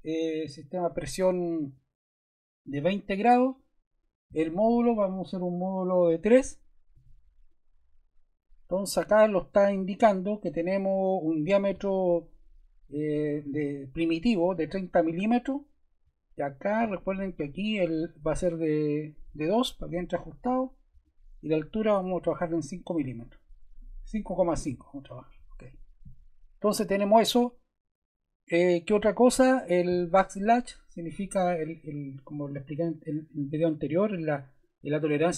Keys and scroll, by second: 6.9 3, 19.3 2, 22.3 5, 24.7 ., 25.0 5.